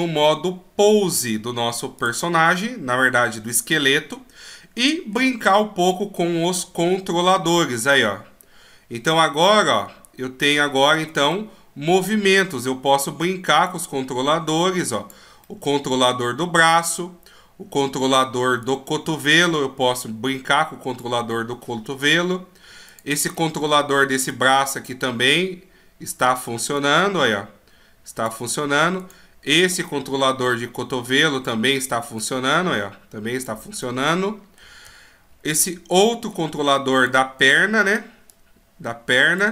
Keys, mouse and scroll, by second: 1.1 click, 2.4 middle click, 3.8 scroll up 2, 4.7 middle click, 5.8 right click, 6.8 g, 11.3 middle click, 13.0 click, 14.5 click, 15.4 middle click, 16.8 right click, 18.6 click, 21.3 middle click, 22.9 right click, 23.3 middle click, 24.3 click, 25.0 click, 26.7 click, 29.0 right click, 29.9 click, 32.2 click, 33.8 middle click, 35.0-35.4 shift+scroll down 1, 35.9 middle click, 36.9 right click, 37.4 right click, 38.3 click.